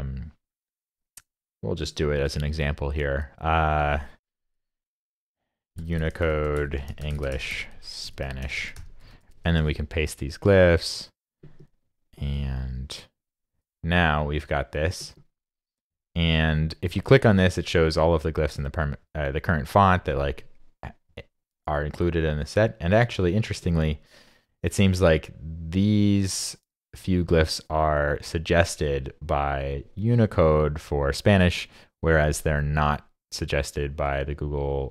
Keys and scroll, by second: 9.6 super+v.